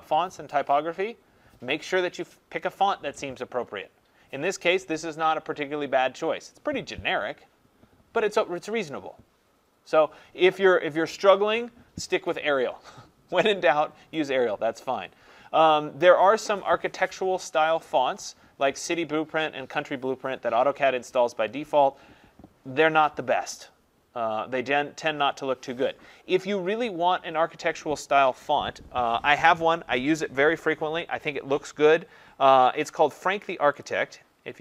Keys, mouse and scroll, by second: 33.8 click.